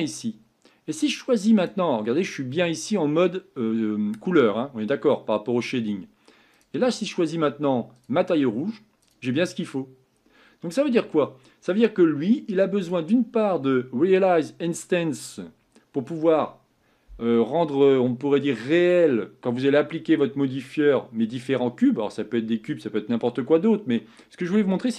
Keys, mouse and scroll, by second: 1.6 click, 4.5-5.8 scroll up 3, 8.0 click, 8.6-9.2 scroll down 1, 9.4-10.1 scroll up 2, 10.1 scroll down 2.